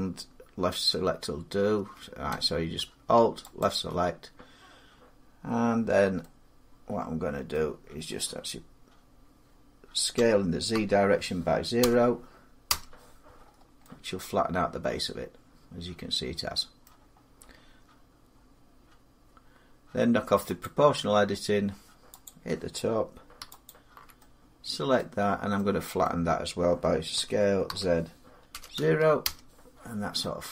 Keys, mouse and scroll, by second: 3.4 alt+click, 7.3 middle click, 9.9 s, 10.5 z, 11.6 0, 12.5 Return, 13.2 middle click, 13.3 middle click, 16.6 middle click, 20.4 click, 21.0 middle click, 21.1 middle click, 22.0 click, 23.5 alt+click, 24.0 scroll up 3, 24.8 middle click, 25.8 middle click, 26.9-29.0 typing, 30.4 middle click.